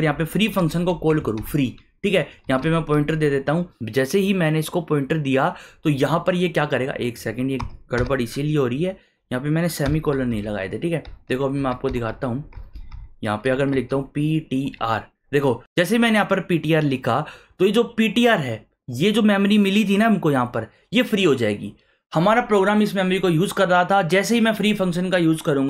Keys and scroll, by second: 0.1-3.4 typing, 7.6 BackSpace, 7.9 ;, 9.8 shift+1, 10.3 Left, 11.6 Left, 12.5-15.1 typing.